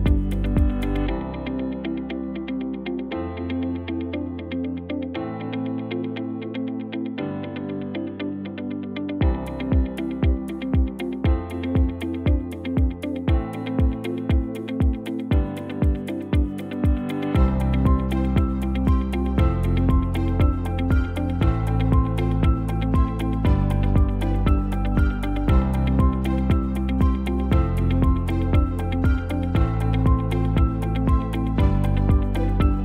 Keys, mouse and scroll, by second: 11.7 shift+d.